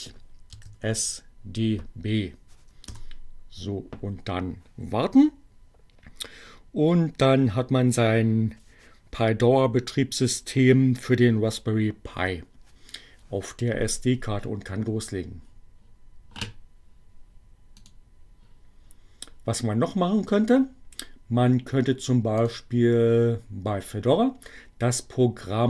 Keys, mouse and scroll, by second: 0.3-1.2 typing, 1.3 Return, 17.7 click, 22.4 click.